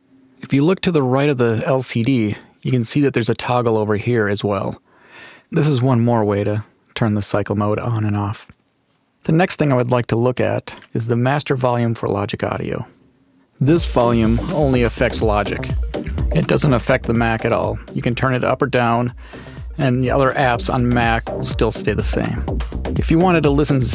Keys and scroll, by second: 13.5 space.